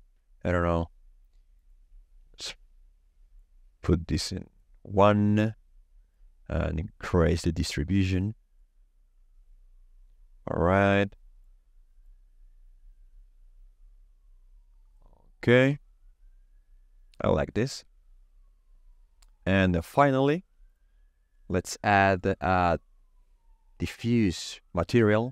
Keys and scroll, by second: 2.3 KP_0, 2.4 Return, 21.9 shift+a, 23.9 d, 23.9 i, 24.0 f, 24.1 f, 24.7 Down, 24.9 Return.